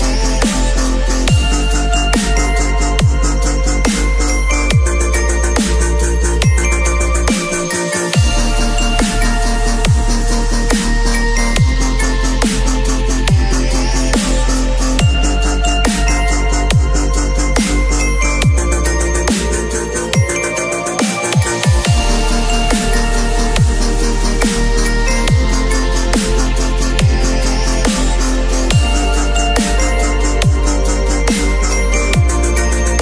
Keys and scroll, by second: 5.5 x, 6.5 [, 10.5 v, 12.5 ctrl+c, 12.5 ctrl+w, 12.7 ctrl+v, 13.0 ctrl+t, 14.2 ctrl+z, 21.4 b, 22.9 x, 28.2 x, 30.2 x.